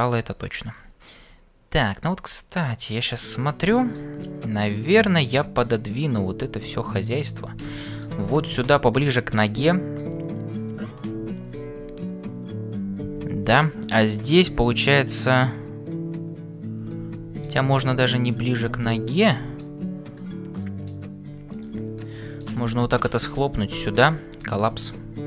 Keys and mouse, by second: 5.1 click, 5.7-7.4 middle drag, 7.7 shift+middle click, 9.1 middle click, 15.0-17.6 middle drag, 18.6 ctrl+z, 19.2 middle click, 20.2 middle click, 21.6 click, 22.1 middle click, 23.2 m, 24.9-25.2 middle drag.